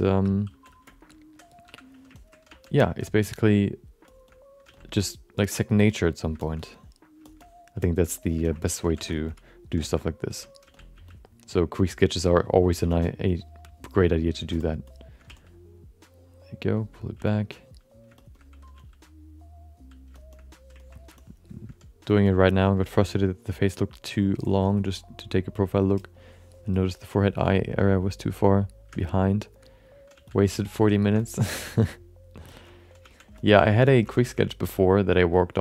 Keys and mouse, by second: 0.1 4, 0.5 f, 0.8 shift+middle click, 1.1 alt+middle click, 1.6 5, 2.1 ctrl+alt+middle click, 2.5 f, 2.8 alt+shift+middle click, 3.0 alt+middle click, 3.5 alt+middle click, 4.1 shift+middle click, 4.2 middle click, 4.6 f, 5.3-6.3 drag, 6.4 alt+shift+middle click, 6.5 alt+middle click, 7.2 shift+middle click, 7.4 alt+middle click, 7.8 alt+shift+middle click, 8.0 alt+middle click, 8.4 ctrl+alt+middle click, 8.8 f, 9.1 alt+shift+middle click, 10.0 alt+shift+middle click, 10.3 middle click, 10.6 f, 10.9 f, 11.6 click, 12.8 f, 13.3 click, 14.6 alt+shift+middle click, 14.8 alt+shift+middle click, 15.3 f, 16.3 click, 17.2 f, 17.7 click, 18.2 shift+middle click, 18.4 alt+middle click, 18.7 f, 19.4 click, 20.1 shift+middle click, 20.3 alt+middle click, 20.8 ctrl+middle click, 21.1 alt+shift+middle click, 22.2 shift+middle click, 29.1 alt+shift+middle click, 29.7 middle click, 30.1 f, 30.5 shift+middle click, 30.7 alt+middle click, 31.2 alt+shift+middle click, 31.5 f, 31.9 click, 32.5 shift+middle click, 32.6 middle click, 33.0 f, 33.3 middle click, 33.6 middle click, 33.9 ctrl+alt+middle click, 34.2 f, 34.6 click, 35.1 click, 35.3 click.